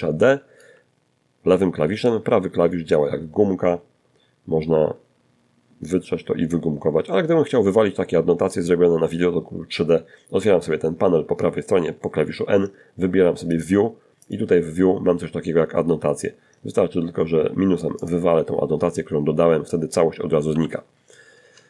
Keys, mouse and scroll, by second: 0.1 d, 0.3-1.9 right drag, 1.9 middle click, 11.7 click, 12.5 click, 13.1-13.5 scroll down 1, 14.6 scroll up 1, 14.8 scroll down 2, 16.2 click, 18.7 n, 19.9 shift+middle click, 20.8 shift+c.